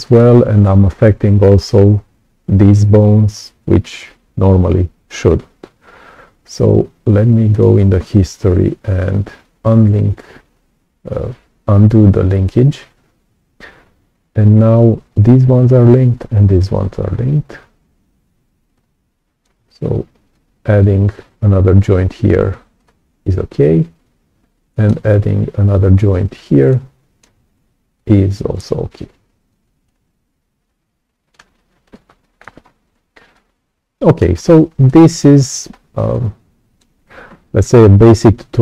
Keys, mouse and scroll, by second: 3.5 ctrl+z, 7.5 click, 9.4 click, 18.6 right click, 18.7 click, 20.3-22.2 ctrl+alt+drag, 22.7-24.8 right drag, 22.8-24.8 drag, 26.6 right click, 26.6 click, 27.9-29.4 ctrl+alt+drag, 29.8-31.3 right drag, 29.8-31.3 drag, 31.8 right click, 31.9 click, 32.6-32.9 scroll up 2, 32.9-34.1 right drag, 33.3 click, 34.3-34.7 scroll down 2, 34.7 right click, 34.8 click, 35.6-36.0 scroll up 2, 36.1 right click, 36.2 click.